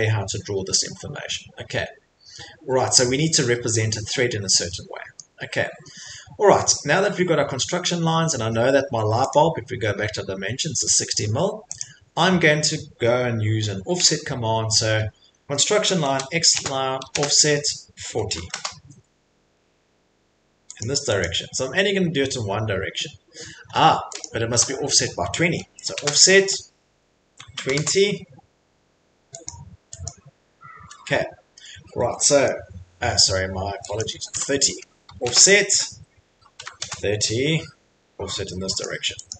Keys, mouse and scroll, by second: 0.6 middle click, 0.6 middle click, 0.9 middle click, 1.4 middle click, 1.7 middle click, 1.8 middle click, 2.1 middle click, 3.8 middle click, 5.2 middle click, 9.3 click, 11.8 click, 16.1-18.7 typing, 20.8 click, 21.2 typing, 21.2 click, 23.6 Escape, 24.2 click, 24.5 Delete, 25.8 typing, 27.1-27.9 typing, 29.5 click, 30.0 click, 30.7 Escape, 31.6 middle click, 31.6 middle click, 32.5 middle click, 33.2 middle click, 33.2 middle click, 34.0 click, 34.4 Delete, 34.7 click, 35.2-36.9 typing, 38.8 click, 39.3 click.